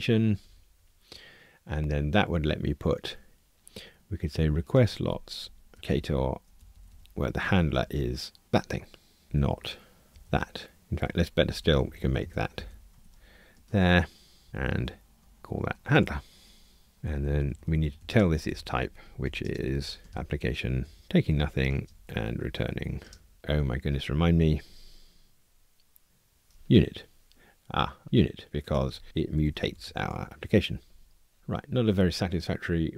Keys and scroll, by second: 5.7 alt+shift+Right, 5.9 Tab, 7.4 alt+shift+Left, 7.9 super+v, 11.5 alt+shift+Left, 13.6 super+v, 14.5 alt+Up, 15.9 Return, 20.1 Return, 30.3 Escape.